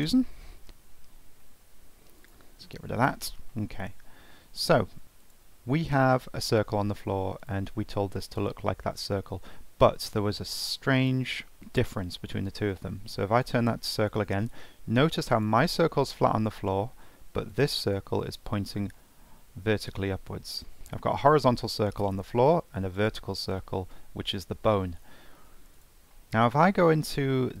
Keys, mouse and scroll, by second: 0.1 Delete, 0.7 click, 2.2 click, 3.5-5.0 middle drag, 5.0 scroll up 1, 5.2 click, 6.4-7.4 shift+middle drag, 7.4 click, 11.0-12.5 drag, 14.2-15.3 middle drag, 15.3 click, 17.5 click, 19.0-20.4 middle drag, 20.4-20.8 scroll down 2, 20.8 middle click, 21.2 click, 22.2-23.0 middle drag, 23.0 click, 24.6-25.8 middle drag, 25.8 click, 26.1-27.6 middle drag.